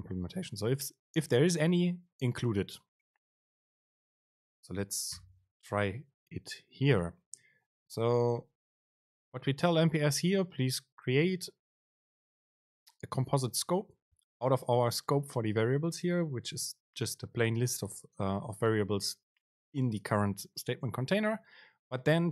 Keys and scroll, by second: 4.0 super+space.